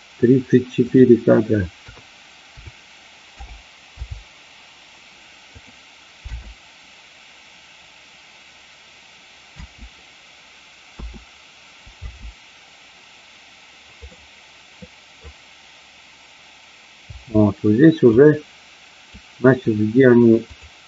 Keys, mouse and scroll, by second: 0.8-3.6 drag, 5.6 click, 6.2 space, 9.6 space, 11.0 a, 12.0 space, 14.1-15.1 middle drag, 17.1 space, 18.1-19.2 drag, 20.5 click.